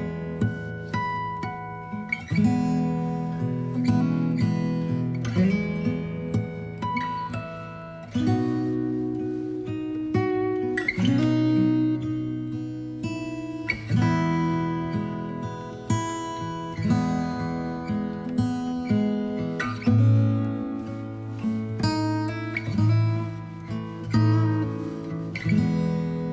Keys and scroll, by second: 2.9 space, 17.8 ctrl+i, 18.3 b, 18.9 alt+x, 22.0 space.